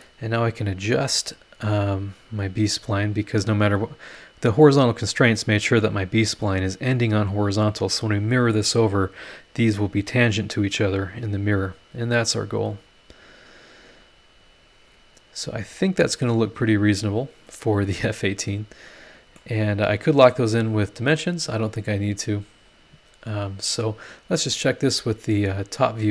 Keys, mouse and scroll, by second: 0.7 click, 2.2-5.5 drag, 11.1-12.6 drag, 14.4-16.5 drag, 19.0 scroll down 1, 19.4-20.5 middle drag, 19.4-20.5 drag, 19.4-20.5 right drag, 20.6 scroll down 2, 25.8 click.